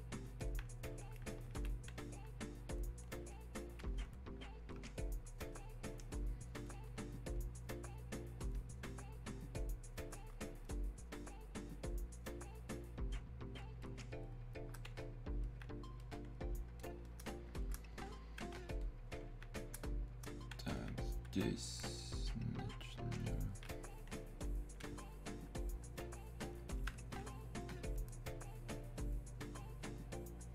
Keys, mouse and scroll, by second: 0.4 alt+click, 2.7-23.9 drag, 23.9-27.1 drag, 27.1-30.5 alt+drag.